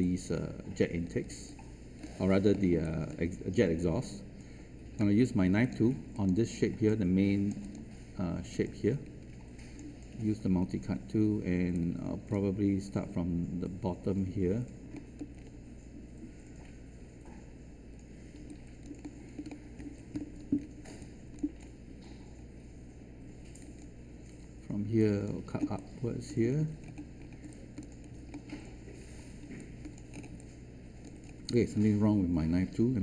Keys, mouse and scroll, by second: 0.0 alt+click, 2.2-2.5 scroll down 1, 2.5 alt+middle click, 2.8 alt+click, 3.9-5.4 right drag, 5.6 click, 6.8 right click, 7.6 click, 9.4 shift+right click, 10.1-11.5 scroll up 1, 11.7 alt+click, 14.4 scroll up 1, 14.9 alt+middle click, 19.0 alt+middle click, 20.5 scroll down 1, 20.9 alt+click, 21.5-21.8 scroll up 1, 23.5 click, 25.5 alt+scroll down 1, 26.4-27.3 scroll down 1, 28.3 alt+middle click, 29.5 alt+click, 30.0 scroll up 1, 30.7 alt+click, 31.2 scroll up 1, 31.4 alt+click.